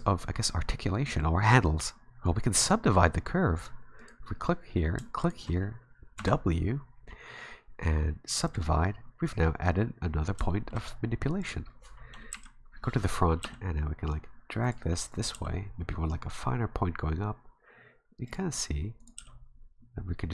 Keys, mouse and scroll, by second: 1.0 middle click, 4.0 right click, 5.2 shift+right click, 6.2 w, 10.5 shift+middle click, 10.8-11.4 scroll up 5, 11.4 right click, 12.3 KP_1, 13.4 g, 15.1 right click, 15.3 g, 19.0 right click, 19.2 g.